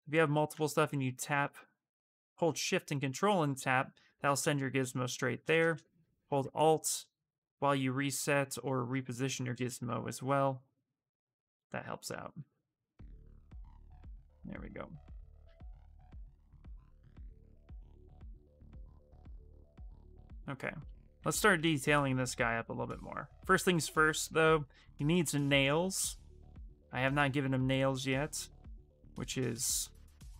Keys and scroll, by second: 12.2 q.